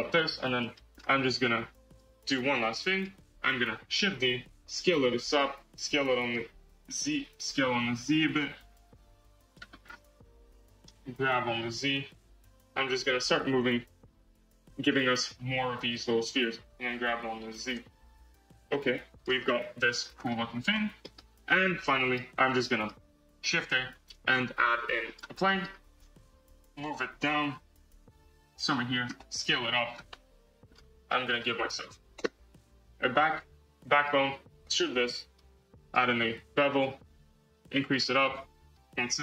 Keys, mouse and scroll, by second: 0.5-1.5 middle drag, 1.5 click, 1.8-3.9 drag, 3.9 shift+d, 5.7 s, 5.9 z, 6.7 z, 7.5 s, 10.2 KP_1, 11.4 g, 13.9 shift+d, 15.3 s, 16.6 g, 19.3-19.9 middle drag, 19.9 scroll, 20.2-20.7 middle drag, 20.7 Tab, 20.9 middle click, 21.1 Tab, 21.5-21.8 scroll down 3, 21.8-23.2 middle drag, 23.2 shift+a, 25.3-26.2 middle drag, 26.2 KP_1, 27.0 g, 29.1 s, 30.0-30.6 middle drag, 30.6 scroll, 31.0-32.1 middle drag, 32.1 Tab, 32.7 click, 33.2 click, 33.8 2, 33.9 click, 34.5 e, 35.7-39.2 drag.